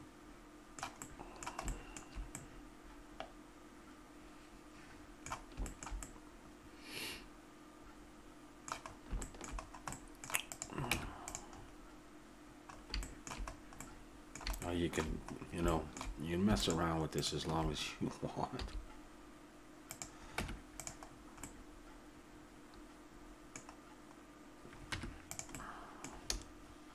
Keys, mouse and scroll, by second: 5.7-7.8 middle drag, 8.9 middle click, 10.5 right click, 10.9 Tab, 11.6-12.7 middle drag, 16.6 click, 17.2 middle click, 17.4-19.1 drag, 18.6 s, 20.4 Tab, 21.1 middle click, 23.6-25.6 middle drag, 24.9 Tab.